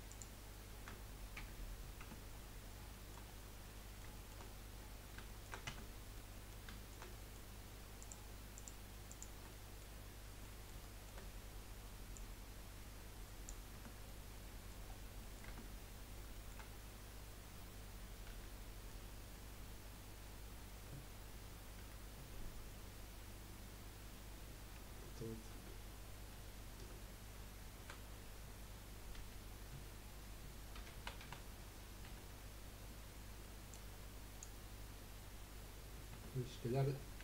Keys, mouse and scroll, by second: 0.1 shift+click, 1.6-2.0 scroll down 1, 2.0 Tab, 2.3-2.9 scroll down 4, 2.9-3.2 shift+middle drag, 3.2 scroll up 3, 3.7-4.4 middle drag, 4.4-5.2 scroll up 1, 5.2-5.6 shift+middle drag, 5.6 Tab, 6.2-8.0 middle drag, 8.0 click, 8.5 shift+click, 9.1 shift+click, 9.5-11.2 middle drag, 11.2 scroll up 2, 12.1 click, 13.7 Tab, 14.0 middle click, 14.9-15.2 scroll down 2, 15.2 middle click, 15.6 Tab, 16.3-18.3 shift+middle drag, 18.3 a, 21.8 3, 25.5 ctrl+z, 26.3 ctrl+z, 27.8 a, 29.2 F3, 36.1 Tab, 36.6-37.2 scroll down 6.